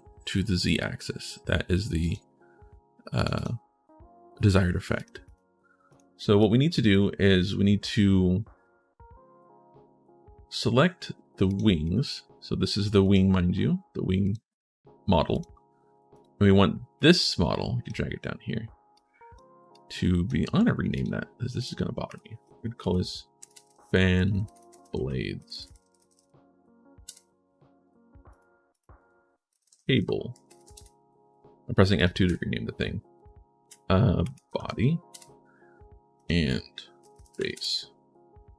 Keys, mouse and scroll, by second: 1.8 click, 2.9 click, 3.1 click, 4.7 click, 5.0 click, 5.7 click, 6.2 right click, 15.1 click, 15.9 click, 16.7 click, 18.7 click, 19.5 click, 20.7 click, 22.6-26.4 typing, 29.5 a, 31.7 click, 35.9 click, 36.7-37.6 typing.